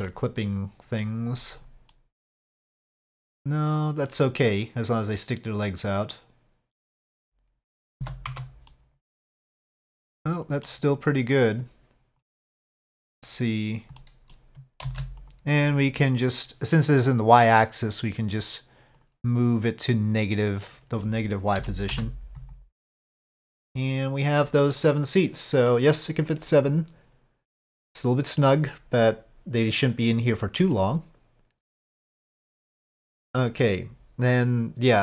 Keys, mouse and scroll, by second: 0.0-0.6 middle drag, 0.6-1.0 drag, 1.9-7.8 middle drag, 7.4 z, 7.4 6, 8.0 z, 8.7-10.7 middle drag, 11.6 click, 12.4-13.2 middle drag, 14.1 middle click, 14.8 shift+d, 19.0 click, 19.6-22.6 drag, 22.8-24.4 middle drag, 24.8-25.7 middle drag, 26.5-28.4 middle drag, 29.1-30.1 middle drag, 30.7-32.3 middle drag, 33.0-33.4 middle drag.